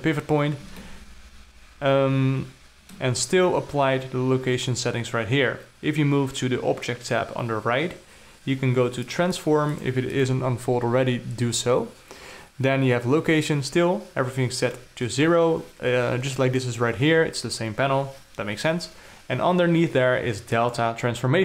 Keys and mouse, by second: 1.3-3.5 alt+middle drag, 7.4 click, 9.6 click, 9.8 click, 10.2 click, 10.6 click, 21.1 click.